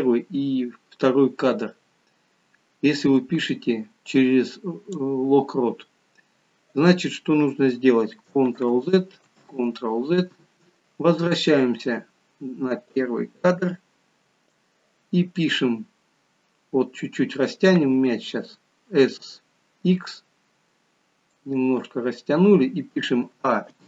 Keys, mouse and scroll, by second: 8.6 ctrl+z, 9.4 ctrl+z, 12.9 click, 23.3 a, 23.7 i.